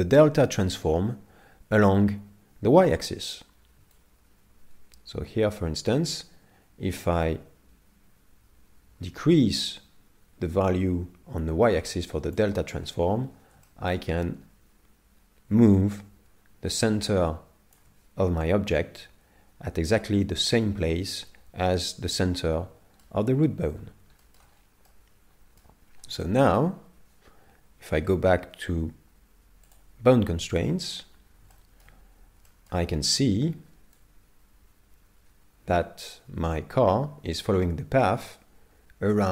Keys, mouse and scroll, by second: 4.0 shift+click, 13.1 scroll up 7, 13.6 shift+middle click, 14.2 scroll down 2, 15.8 shift+click, 15.8 scroll down 2, 22.4 middle click, 23.5 scroll down 4, 24.2 shift+middle click, 24.9 middle click, 25.8-26.4 scroll down 2, 26.2 shift+middle click, 26.8 scroll down 1, 29.7 click, 30.7 middle click, 31.2-32.5 scroll down 5, 31.5 shift+middle click, 32.5 shift+middle click, 34.0 click.